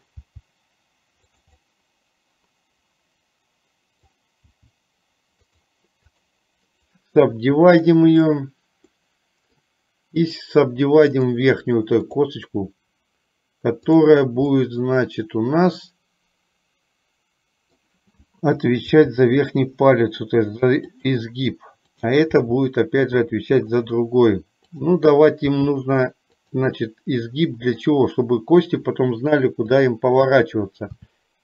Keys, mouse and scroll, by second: 0.3 g, 1.7-4.5 middle drag, 4.6 g, 6.2 click, 7.6-9.2 right drag, 9.2 middle click, 10.5 click, 14.7-18.0 middle drag, 19.0 g, 22.6 g, 25.6 g, 27.0-28.1 middle drag, 29.8 click, 31.1 e.